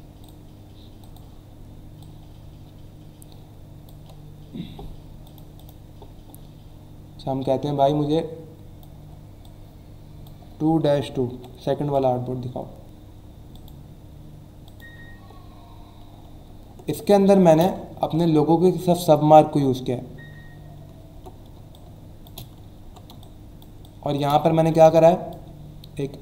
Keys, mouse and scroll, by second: 0.2 click, 1.1 click, 2.0 click, 5.2 click, 5.6 click, 8.0 click, 9.0 2, 9.4 click, 11.6-12.3 typing, 13.5 click, 14.6 click, 16.4 alt+scroll up 1, 17.1 click, 17.4 space, 17.9 alt+scroll up 1, 21.0 alt+scroll down 1, 21.5 space, 21.7 click, 22.0 space, 22.7 alt+scroll down 1, 23.1-25.4 typing, 23.2 click, 23.8 click, 24.5 alt+scroll up 1, 24.9 click.